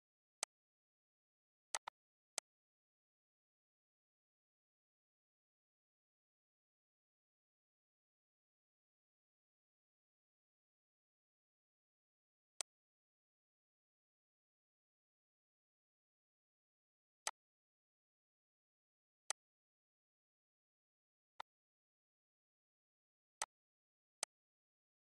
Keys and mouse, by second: 0.3 click, 1.0 click, 2.2 click, 2.7 click, 5.0 click, 6.5 click, 7.3 click, 7.8 click, 10.2 click, 13.3 click, 13.7 click, 14.5 click, 15.3 click, 17.2 click, 18.0 z, 18.5 click, 19.0 click, 20.4 click, 20.9 click, 22.4 click, 24.2 click.